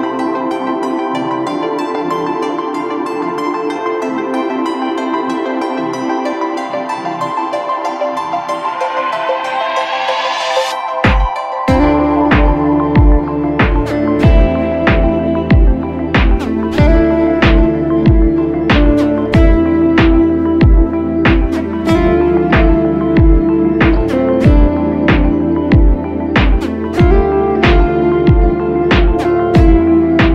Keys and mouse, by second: 6.2 shift+d, 17.3 shift+d.